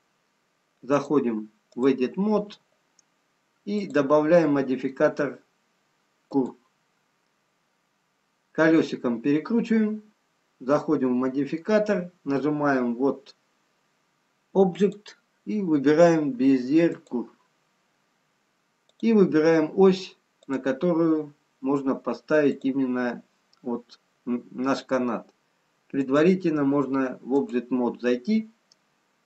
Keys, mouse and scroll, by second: 8.1 scroll down 3, 9.6-11.4 scroll down 6, 14.8 click, 20.2 click, 26.0 click.